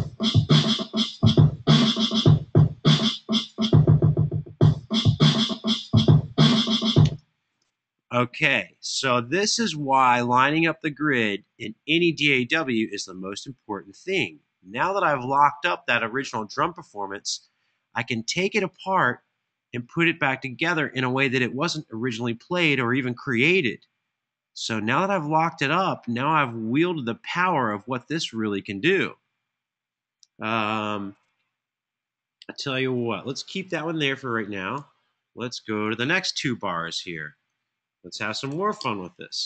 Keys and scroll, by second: 6.8 space, 34.5 Right, 38.1 2, 38.5 Return.